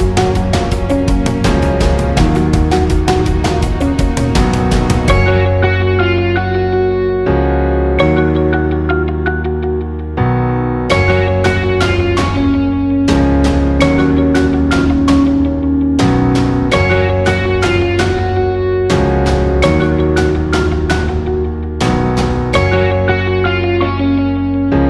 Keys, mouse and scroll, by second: 4.4-7.7 drag, 10.3-18.0 drag, 18.0 ctrl+z, 19.0-24.8 drag.